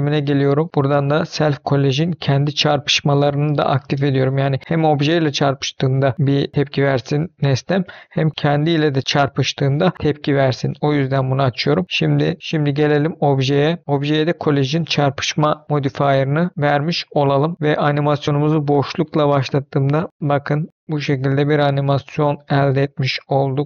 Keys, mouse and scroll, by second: 1.4 click, 12.6 click, 15.1 click, 16.9 click, 17.5 middle click, 18.2 space, 22.9 space, 23.2 middle click.